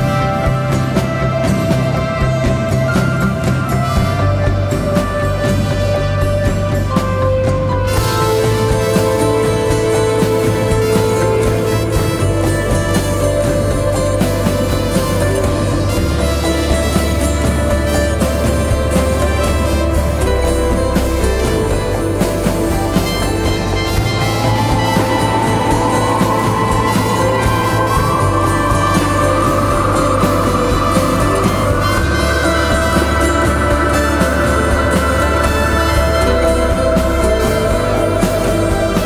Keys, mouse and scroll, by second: 9.8-11.8 typing, 12.6 double click, 20.9 ctrl+click, 27.8 alt+click, 34.3 ctrl+d.